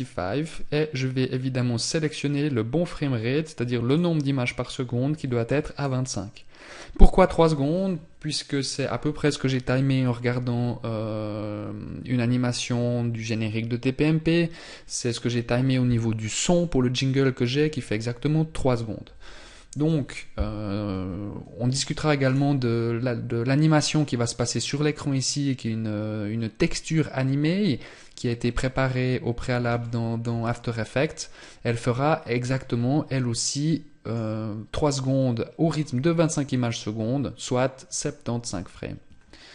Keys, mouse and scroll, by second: 21.8 right click, 29.3 shift+middle click, 29.9 middle click.